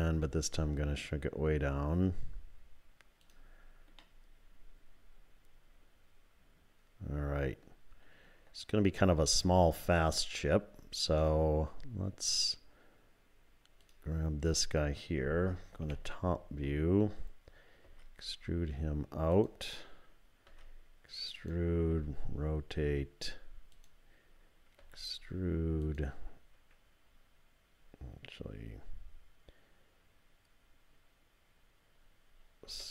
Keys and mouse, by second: 4.0-7.7 drag, 13.8 click, 15.8 KP_7, 17.9 e, 20.5 e, 21.9 r, 24.8 e, 32.7 s.